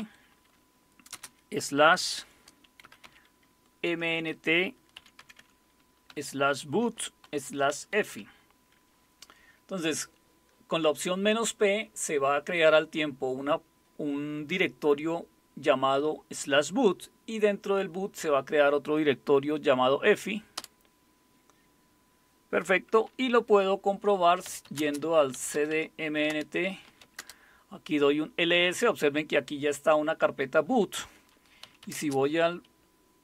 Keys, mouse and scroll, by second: 1.1 typing, 2.2-3.5 typing, 3.9 Tab, 4.7-8.6 typing, 20.6 Return, 24.2-27.5 typing, 31.4-33.2 typing.